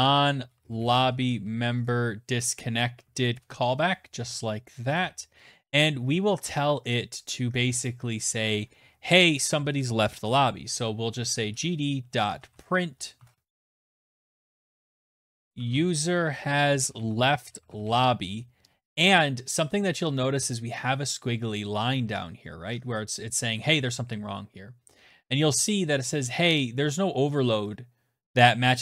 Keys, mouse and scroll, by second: 0.0-1.1 typing, 1.8 Down, 2.0 Down, 2.3 Return, 2.6-4.3 typing, 10.1-17.4 typing, 18.0 click.